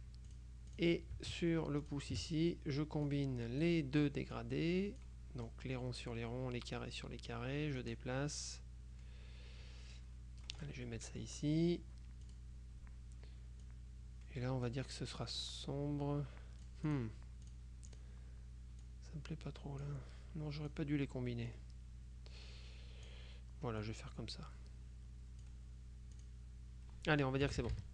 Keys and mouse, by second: 0.4-1.4 drag, 1.9 shift+click, 3.2-4.2 drag, 4.4-5.6 drag, 6.8-7.9 drag, 10.7 click, 11.0 right click, 12.4 click, 13.7-15.3 drag, 16.7 click, 18.9-20.4 drag, 20.8-23.6 drag, 23.9-26.0 drag, 26.3 click, 27.6 KP_Subtract.